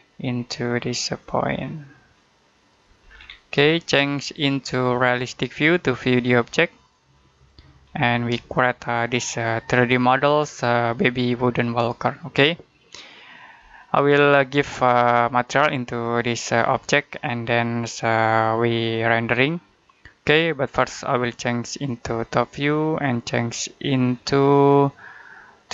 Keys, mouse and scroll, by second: 0.2-2.5 scroll up 1, 2.6 click, 2.9-3.5 scroll down 1, 4.2 middle click, 5.7 click, 7.8-8.2 scroll down 1, 8.4 middle click, 13.7 middle click, 14.3-15.1 scroll up 1, 16.9 shift+middle click, 21.7 click.